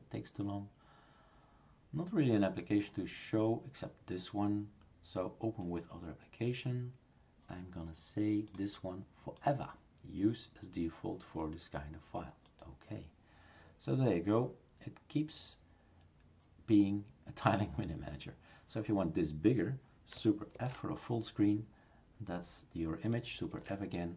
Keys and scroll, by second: 20.6 super+f.